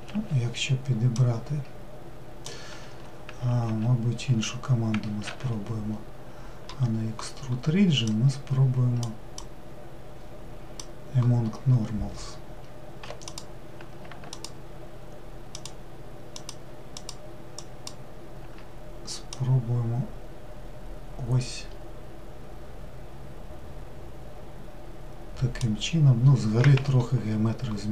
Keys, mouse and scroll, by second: 1.1 click, 2.9 Escape, 8.0-12.4 drag, 13.2 click, 14.3 alt+click, 15.5 alt+click, 16.3 alt+click, 17.0 alt+click, 17.6 alt+click, 19.3 click.